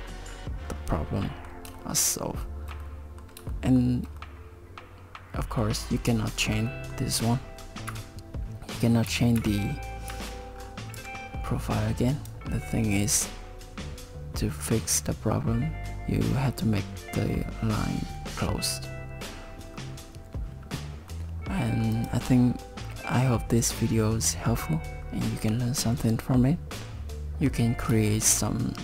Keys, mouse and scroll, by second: 0.3-1.2 scroll up 9, 1.2 middle click, 1.7 shift+middle click, 2.2 middle click, 2.8 middle click, 3.5 shift+middle click, 4.2 middle click, 6.3 shift+middle click, 6.7 middle click, 9.4 KP_7, 10.1 z, 10.5-10.9 scroll down 4, 10.9 Tab, 12.1 click, 20.7 shift+middle click, 21.1 middle click, 21.9 click, 22.9 middle click, 26.9 Tab, 26.9 middle click, 26.9 click, 26.9 scroll down 3, 28.1 shift+middle click.